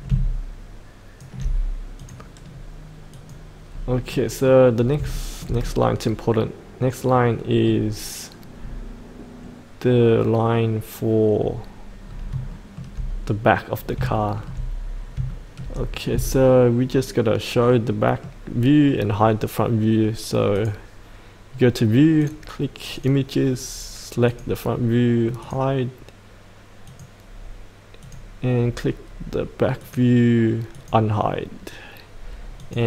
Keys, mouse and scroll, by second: 2.5 scroll up 1, 3.2 click, 3.7-4.1 scroll up 1, 4.1 middle click, 4.7 scroll down 1, 5.7-8.1 middle drag, 11.7-12.1 scroll up 1, 12.1 scroll down 1, 12.5 shift+middle click, 13.7 scroll up 1, 14.2 shift+middle click, 14.7-15.2 scroll up 1, 15.3 shift+middle click, 17.3 shift+middle click, 18.3 middle click, 19.3 middle click, 20.5-25.4 drag, 29.0-29.8 scroll down 1, 29.8 click.